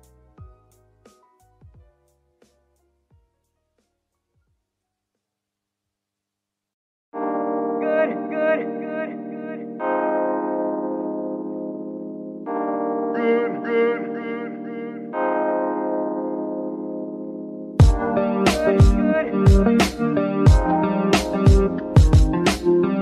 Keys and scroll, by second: 4.4-5.1 typing, 6.5 BackSpace, 7.9-10.7 typing, 11.0 Return, 13.1 g, 15.1 shift+g, 17.9 z, 18.7 g, 22.3 shift+g.